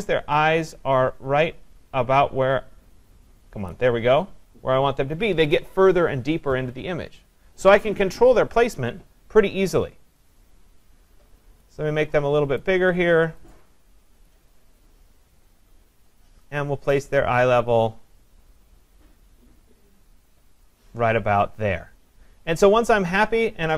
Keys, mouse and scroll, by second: 3.7 click, 11.6 click, 12.6 click, 14.3 click, 20.6 click.